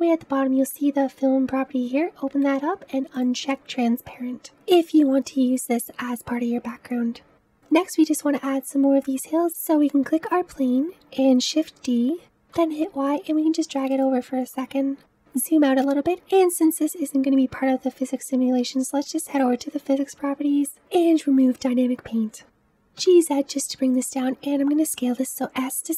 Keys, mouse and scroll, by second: 3.3 click, 7.3-8.4 middle drag, 8.4 scroll down 1, 9.3 click, 11.8 shift+d, 21.8-22.7 drag, 22.7 g.